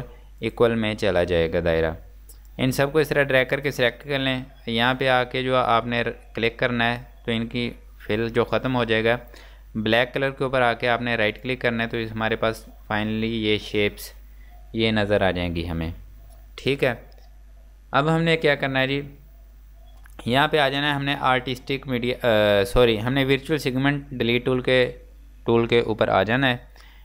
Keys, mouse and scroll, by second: 0.5 click, 2.1-2.6 scroll down 1, 2.6 click, 6.9 click, 11.4 click, 12.6 scroll down 1, 12.9-13.2 scroll up 1, 17.1-18.6 scroll up 1, 20.4 click, 26.3 click.